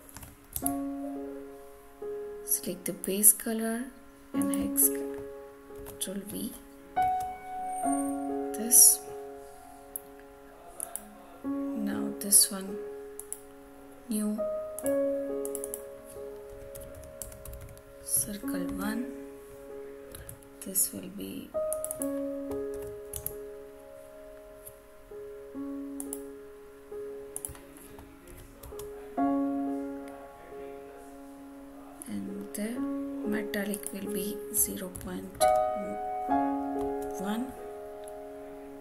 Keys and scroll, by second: 0.1 ctrl+c, 0.5 alt+Tab, 5.7 ctrl+v, 6.9 Return, 18.6 Return, 20.3 alt+Tab, 23.1 alt+Tab, 28.2 ctrl+v, 28.5 Return, 36.7 Return.